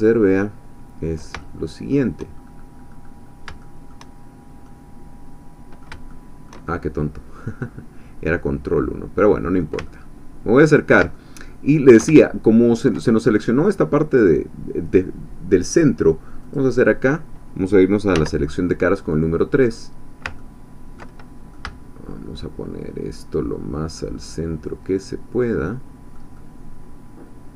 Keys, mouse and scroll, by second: 1.4 shift+middle click, 2.4-3.4 scroll up 2, 3.4 scroll down 2, 3.6 shift+middle click, 4.3-4.6 shift+scroll down 3, 4.6-6.6 drag, 7.0 click, 8.3-9.8 drag, 9.8 ctrl+click, 9.9-12.0 ctrl+middle drag, 12.0-13.1 ctrl+shift+drag, 16.4 click, 17.1 scroll down 2, 18.2 3, 19.0-20.2 drag, 20.4 ctrl+click, 21.5 click, 21.6-27.5 shift+middle drag.